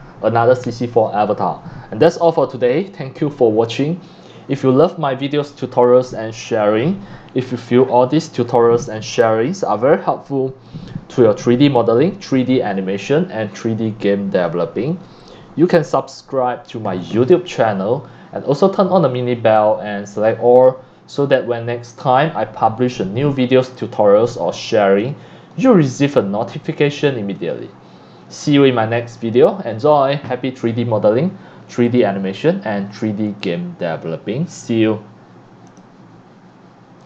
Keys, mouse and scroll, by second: 18.7 scroll up 1, 19.3 scroll down 1, 23.7-24.6 drag, 25.0 click, 25.8-27.4 drag, 27.9 scroll up 1, 31.9 click, 33.2 click, 34.0 click, 35.7 click, 37.0 click.